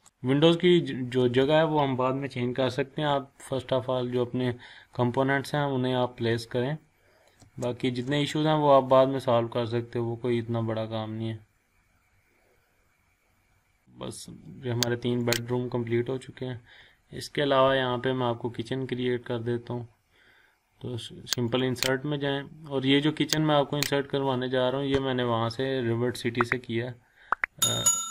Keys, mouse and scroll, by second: 1.2 scroll up 1, 3.3 scroll down 1, 3.9 scroll up 1, 4.9 scroll down 1, 5.4 scroll up 1, 7.4 space, 13.8 scroll up 1, 15.2 click, 15.3 click, 16.1-16.7 scroll up 2, 21.5 click.